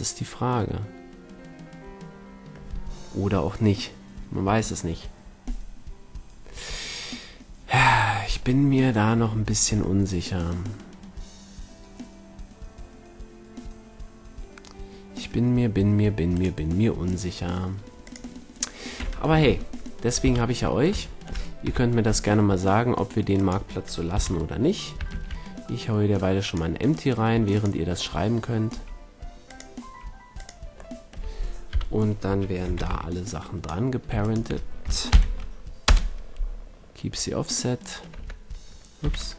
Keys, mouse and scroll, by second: 8.6-13.3 middle drag, 16.2-17.9 drag, 17.9 middle click, 18.5-19.7 drag, 19.2 a, 20.1 KP_1, 21.6 KP_5, 24.1 KP_3, 25.0 shift+a, 28.7 s, 29.5-31.1 drag, 29.7 s, 31.7 KP_1, 32.2 a, 32.6 z, 32.8 b, 35.0 ctrl+p, 38.1 Tab, 38.9 z.